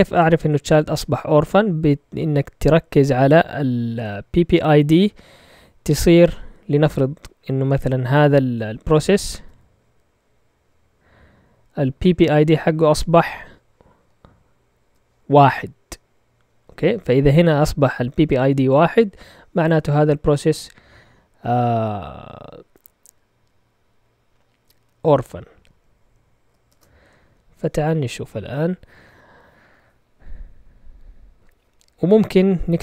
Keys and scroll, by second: 26.6 shift+super+z.